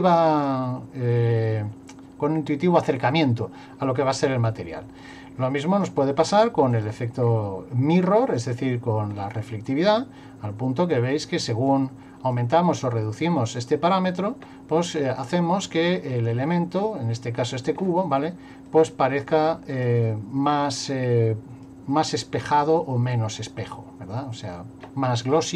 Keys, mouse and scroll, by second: 5.1 click, 6.8 click, 7.2 scroll down 2, 8.3 click, 10.0 click, 11.7 click, 13.3 click, 18.7 click, 20.5 click, 22.2 click, 23.6 click.